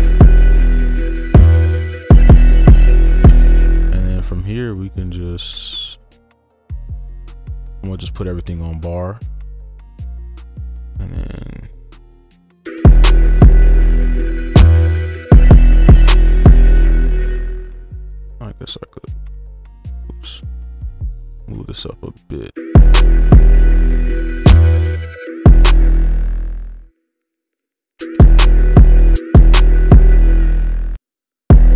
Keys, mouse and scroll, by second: 3.3 space, 4.6 right click, 5.3 ctrl+a, 5.6-6.1 alt+scroll up 3, 7.5 alt+scroll up 1, 7.5-8.1 scroll down 1, 12.6 space, 17.0 space, 17.3 right click, 19.1 ctrl+a, 19.6 right click, 20.2 ctrl+a, 20.8-22.2 alt+scroll up 1, 22.6 space, 24.9 space, 25.2 space, 25.7 space, 26.6 double click, 26.8 right click, 27.5 double click, 28.0 space, 28.8 space, 30.1 space, 31.0 double click, 31.5 space.